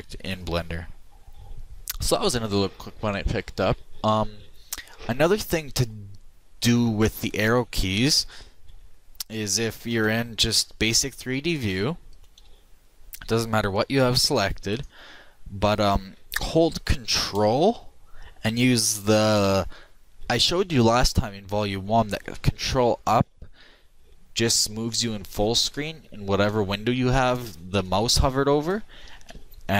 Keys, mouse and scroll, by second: 7.9 middle click, 8.8 KP_3, 10.0 KP_1, 12.5 a, 23.1 ctrl+Up, 25.8 ctrl+Up, 26.6 ctrl+Up, 27.3 ctrl+Up, 29.3 ctrl+Up.